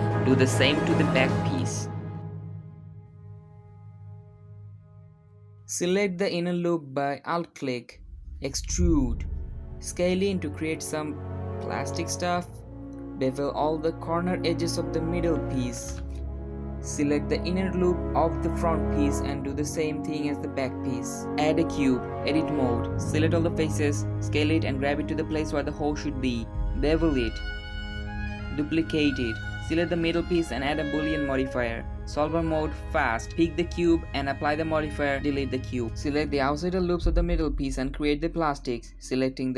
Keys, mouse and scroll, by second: 0.1 shift+middle click, 0.7 ctrl+b, 4.7 middle click, 4.8 Tab, 6.2 alt+click, 7.3 e, 9.5 s, 11.3 scroll up 1, 11.5 Tab, 12.4 click, 12.9 shift+middle click, 13.0 shift+click, 13.4 middle click, 13.7 shift+click, 14.0 shift+middle click, 14.1 shift+click, 14.7 ctrl+b, 17.7 middle click, 17.9 alt+click, 19.2 e, 20.1 s, 21.1-22.0 shift+middle drag, 22.0-22.4 scroll down 1, 22.5 Tab, 22.9-23.9 shift+middle drag, 23.9 KP_7, 24.1 scroll up 3, 24.3 s, 25.1 g, 26.1 g, 26.6 middle click, 27.6 scroll down 2, 27.8 shift+d, 29.8-30.3 middle drag, 30.3 click, 32.7 click, 33.1-34.5 drag, 33.8 shift+middle click, 34.8 x, 35.0-35.3 scroll down 1, 35.3 alt+click, 35.7 alt+shift+click, 36.2 e, 36.6 s, 37.4 Tab, 37.8 alt+click, 38.0 alt+shift+click, 38.2 scroll up 2, 38.4 ctrl+b, 39.3 click.